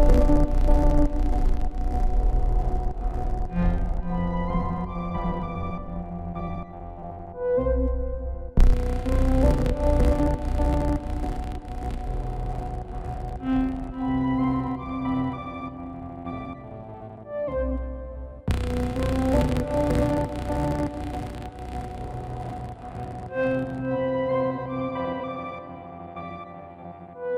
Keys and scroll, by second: 5.5 ctrl+z, 11.0 ctrl+alt+shift+e, 17.0 ctrl+g.